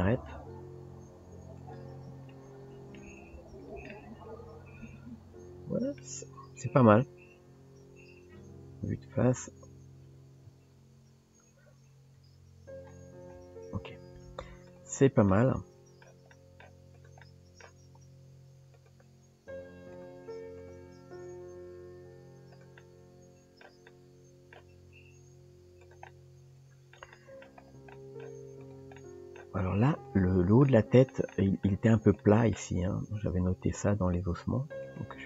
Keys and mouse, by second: 2.3 middle click, 3.3 Tab, 4.0-6.0 middle drag, 6.7 KP_3, 8.7 KP_1, 10.5 KP_3, 12.2 KP_1, 13.6 Tab, 14.7 click, 15.3 middle click, 16.3 middle click, 16.9 click, 17.2 middle click, 19.1 r, 20.6 click, 21.2 s, 22.8 middle click, 23.9 middle click, 26.1 middle click, 27.1 shift+middle click, 28.0 middle click, 28.6 click, 29.0 middle click, 30.7 middle click, 31.3 middle click, 32.2 middle click, 33.1 r, 34.3 g.